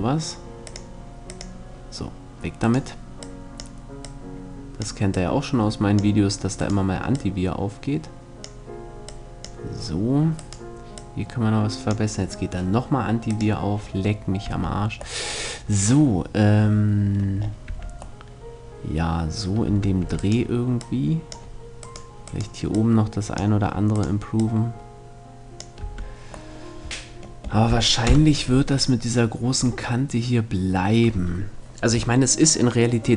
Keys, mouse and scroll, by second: 2.2-4.1 right drag, 2.8-6.8 drag, 6.2 right click, 8.0-10.0 drag, 10.8-12.5 drag, 10.8-12.2 right drag, 14.0 Tab, 17.3 Tab, 19.3 Tab, 19.6 Tab, 19.8-25.2 right drag, 20.4-22.2 drag, 22.3-25.2 drag, 25.4 Tab, 27.7 KP_0.